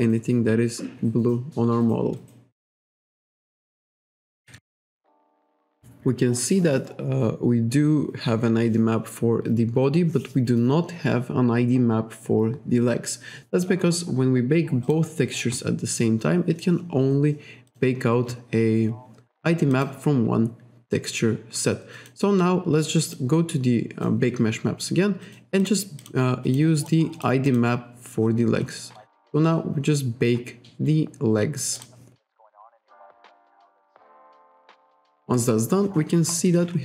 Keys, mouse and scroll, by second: 4.5 KP_5, 14.9 click, 17.7 click, 19.8 click, 22.0 click, 23.2 click, 25.3 click, 25.7 click, 26.1 click, 26.5 click, 26.8 click, 27.2 click, 27.5 click, 31.8 click, 34.8 click, 35.4-36.3 scroll down 2, 36.4-36.7 scroll up 1, 36.7-36.8 scroll down 2.